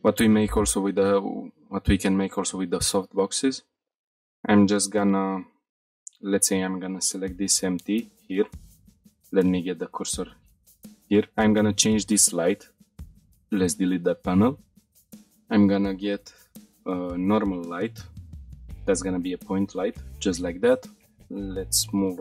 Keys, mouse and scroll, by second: 1.0-1.8 shift+middle drag, 2.0 middle click, 2.7-3.3 shift+middle drag, 3.6 middle click, 4.1 middle click, 4.9 click, 5.7 click, 6.2 click, 7.3 click, 8.6 shift+s, 10.5 click, 12.9 Delete, 13.3-13.9 shift+middle drag, 13.9-14.8 middle drag, 14.9 shift+a, 21.2 middle click, 22.1 g.